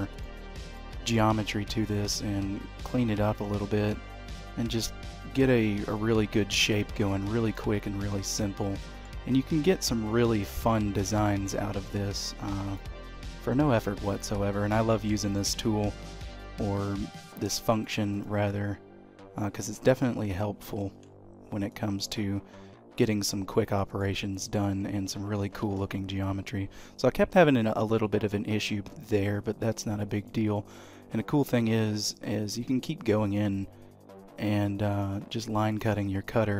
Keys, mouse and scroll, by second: 0.7 shift+middle click, 2.1 click, 5.8 click, 7.9 shift+scroll up 1, 8.0 shift+middle click, 8.8 shift+middle click, 10.7 click, 15.9 click, 20.8 ctrl+z, 21.7 click, 25.6 ctrl+z, 28.3 click.